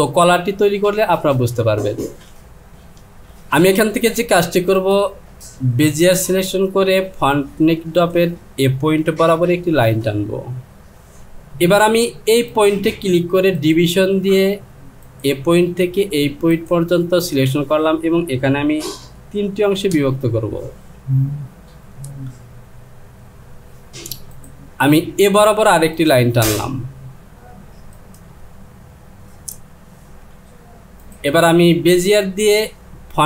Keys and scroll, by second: 19.2 KP_3, 19.9 Return.